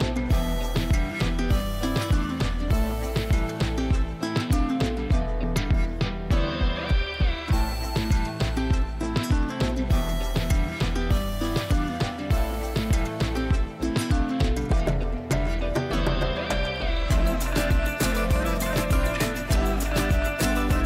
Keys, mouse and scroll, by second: 1.6-2.5 drag, 3.8 ctrl+z, 4.7-5.3 drag, 8.1 ctrl+z, 9.1 click, 10.8 j, 12.7 right click, 13.2-16.7 drag.